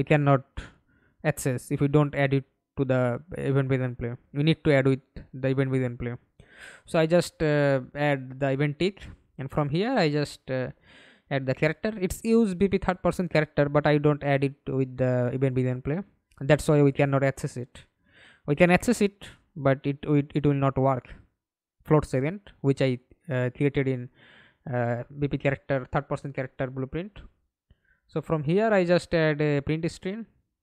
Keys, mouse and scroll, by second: 0.0-0.5 scroll up 3, 0.5 right click, 1.0 right click, 2.0-3.7 typing, 4.3-4.9 scroll up 6, 4.9 right click, 8.3 double click, 12.4-15.1 typing, 15.4 Down, 15.6 Down, 15.8 Down, 18.4 Return, 24.1 right click, 25.9-27.1 typing, 27.2 Return.